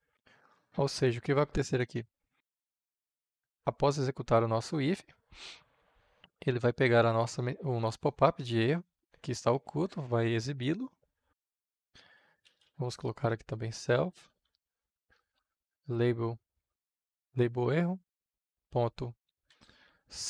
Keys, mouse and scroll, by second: 0.0-1.0 typing, 6.3-11.8 drag, 11.8 Return, 11.8-13.2 typing, 14.4-15.9 typing, 18.3-19.9 typing.